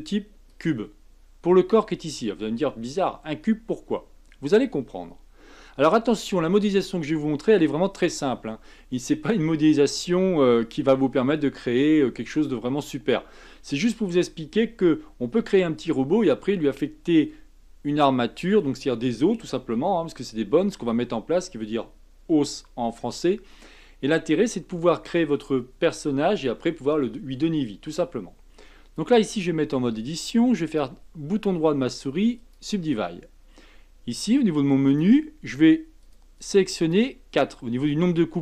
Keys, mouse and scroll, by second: 29.6 Tab, 30.6-33.7 right drag, 34.8-37.3 drag.